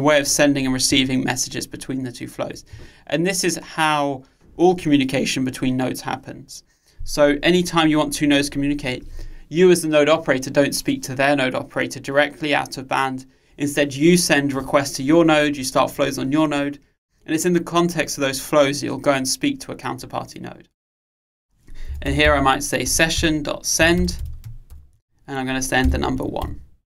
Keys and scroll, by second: 23.0 Return.